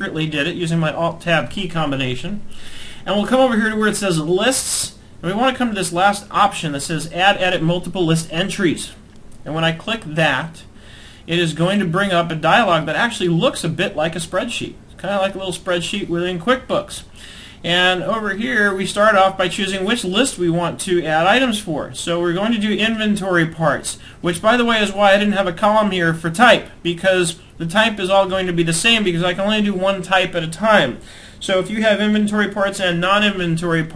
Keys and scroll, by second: 23.9 alt+Tab, 27.9 alt+Tab.